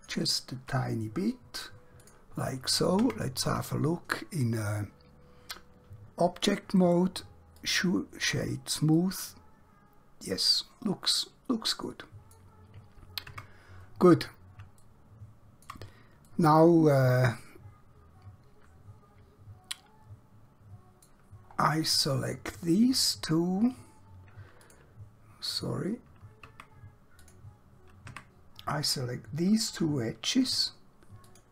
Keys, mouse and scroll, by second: 2.1 click, 3.1 Tab, 6.7 right click, 7.5 click, 9.0 middle click, 13.2 Tab, 14.0-14.7 scroll down 1, 14.9 shift+middle click, 16.4 middle click, 21.5 scroll up 1, 24.7 click, 26.5 Tab, 27.3 click, 28.2 Tab, 29.8 2, 31.2 alt+click.